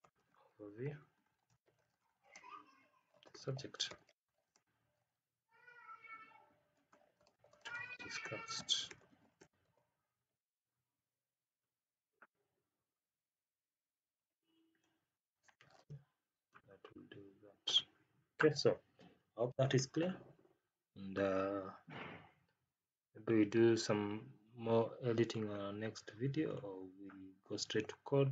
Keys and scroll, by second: 1.4 space, 1.9 space, 2.2 space, 4.4 space, 7.1 space, 7.5 space, 15.4 Left.